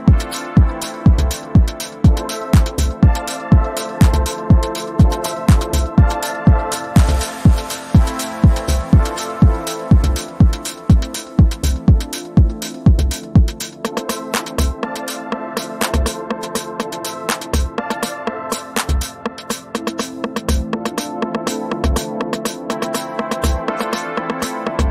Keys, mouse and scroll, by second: 3.4-6.5 drag, 6.7-7.4 ctrl+scroll up 2, 7.4-8.9 drag, 9.5 Right, 11.1 Down, 11.8 Left, 12.3 Down, 13.0-13.4 ctrl+scroll down 1, 13.9-18.4 drag, 19.8-23.5 typing, 20.1 click, 24.0-24.9 drag.